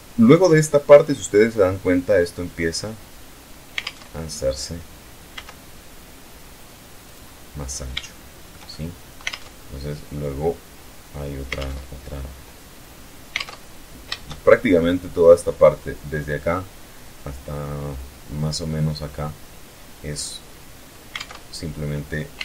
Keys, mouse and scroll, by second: 3.4 alt+Tab, 4.8 s, 6.6 click, 7.5-8.8 shift+middle drag, 8.7 alt+click, 8.8 alt+Tab, 11.1 alt+Tab, 12.1 middle click, 14.2-14.8 shift+scroll up 5, 20.6 alt+Tab, 21.9 e, 22.2 z.